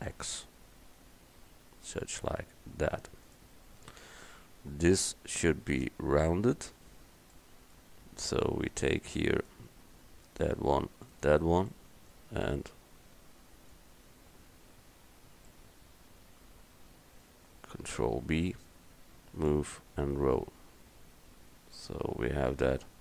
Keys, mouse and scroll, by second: 7.6 middle click, 10.3-11.8 right drag, 11.8 click, 11.8 right click, 12.1 right click, 12.2 click, 18.1 ctrl+b.